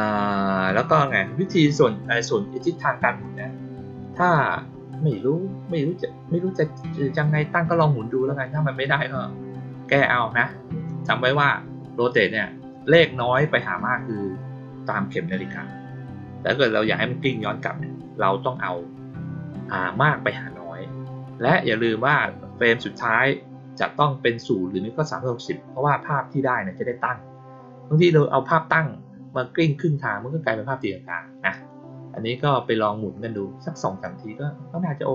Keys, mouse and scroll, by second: 1.9-2.5 drag, 3.1 click, 33.9-35.1 drag.